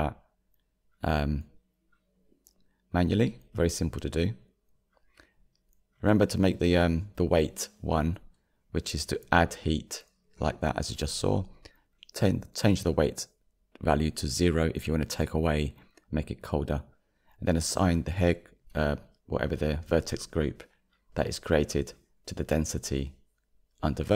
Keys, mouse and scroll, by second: 1.0-2.6 scroll down 7, 2.6 shift+middle click, 3.2 scroll down 2, 3.5-6.1 shift+middle drag, 6.1-9.7 drag, 9.7 ctrl+z, 10.4-12.4 middle drag, 12.3-12.8 scroll down 12, 14.7-17.2 drag, 17.2-18.8 shift+middle drag, 18.8-19.4 drag, 22.0 scroll down 6, 22.6-24.1 shift+middle drag, 24.1 click.